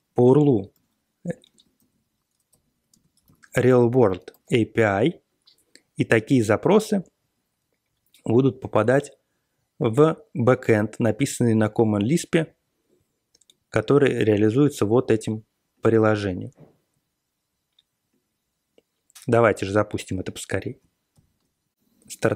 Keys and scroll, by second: 0.7 alt+w, 1.5-4.9 typing, 21.1 alt+shift+,.